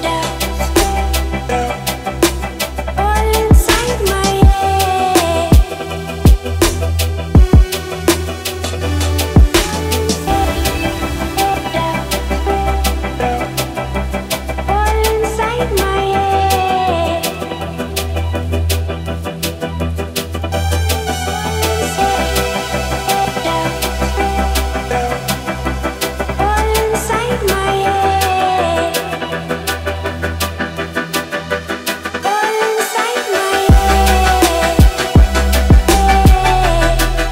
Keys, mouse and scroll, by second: 0.7 Left, 7.2-8.8 drag, 24.8-25.2 scroll down 1, 25.2-25.8 middle click, 26.3-27.3 drag, 27.7 ctrl+z, 28.5 click, 31.4-31.8 scroll up 1, 31.8-32.8 middle drag, 33.7 click, 35.7 right click, 36.6-37.3 drag.